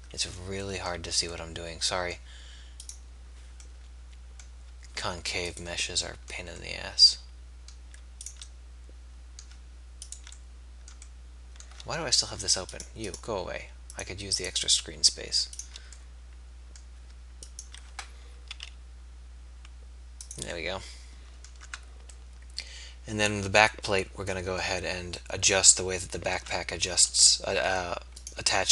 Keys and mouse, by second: 0.9 z, 1.5 middle click, 6.7-11.5 middle drag, 16.1 middle click, 16.5 middle click, 16.7 middle click, 16.9 middle click, 18.4 s, 20.7 middle click, 21.7 Tab, 22.7-23.7 middle drag, 25.6 middle click, 26.5 Tab.